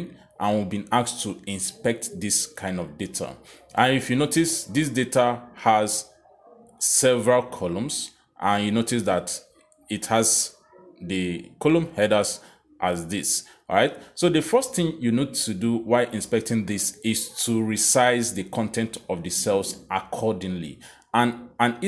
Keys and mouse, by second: 0.5 click, 3.5 click, 4.4 click, 6.6 click, 7.1 click, 7.8 click, 8.8 click, 11.3 click, 12.1 click, 12.6 click, 13.7 click, 15.4 click, 16.6 click, 18.4 click, 19.0 click, 19.6 click, 20.5 click.